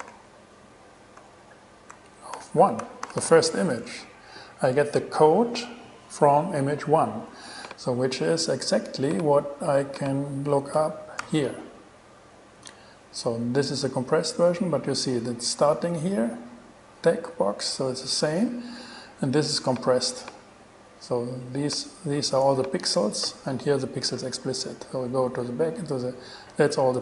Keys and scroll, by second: 0.1 alt+5, 1.4 alt+BackSpace, 2.1 alt+BackSpace, 2.6 alt+5, 3.3 alt+6, 3.9 alt+shift+6, 3.9 alt+shift+Return, 4.7 shift+Return, 11.4 shift+super+e.